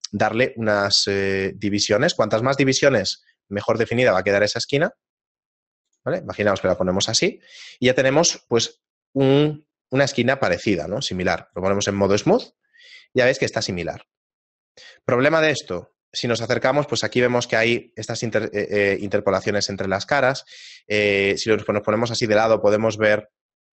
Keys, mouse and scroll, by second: 6.6 Tab, 7.3 shift+middle click, 7.9 scroll up 1, 9.8-10.5 scroll up 2, 11.5 click, 12.6-13.5 scroll down 2, 13.5 shift+middle click, 15.8-16.7 scroll up 5, 18.6 shift+middle click, 19.1 middle click, 19.9 shift+middle click, 20.6-21.0 scroll up 2, 21.5 a.